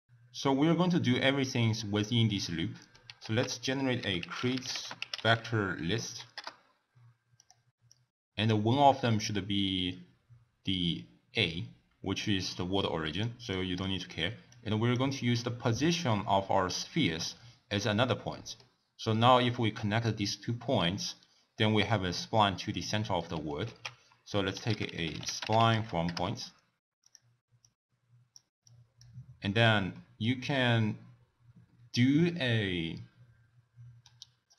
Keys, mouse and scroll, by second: 2.4 middle click, 3.2 ctrl+a, 7.9-10.9 drag, 13.5-14.5 drag, 15.3-17.7 drag, 18.3-18.7 middle drag, 18.7-19.5 scroll up 1, 19.5-21.8 scroll up 3, 22.9 middle click, 23.6 ctrl+a, 27.6 click, 28.6 click, 29.2-30.0 scroll down 1, 30.0 middle click, 30.3-30.9 scroll down 1, 30.9-34.0 scroll down 2.